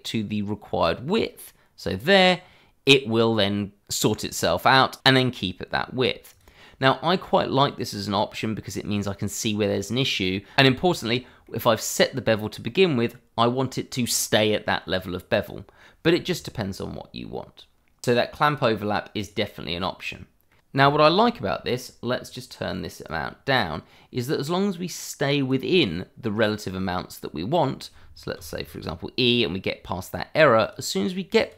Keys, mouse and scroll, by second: 6.4 click, 6.8 scroll down 1, 8.2-9.2 scroll up 1, 9.2 middle click, 11.4 middle click, 14.9 middle click, 18.3-19.1 scroll up 1, 19.2 click, 19.6-19.9 scroll down 1, 19.9 middle click, 20.9 click, 21.1 middle click, 21.5-21.9 scroll up 1, 21.9 middle click, 22.0 shift+middle click, 22.8 click, 28.3 e, 30.6 click.